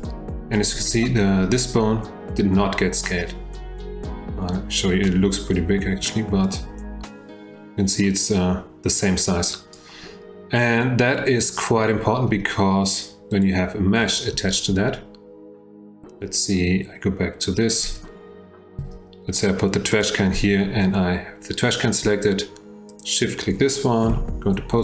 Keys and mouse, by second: 6.6-9.7 drag, 11.3 click, 13.3 click, 18.8 F1, 18.8 g, 22.9 shift+click, 24.1 F3.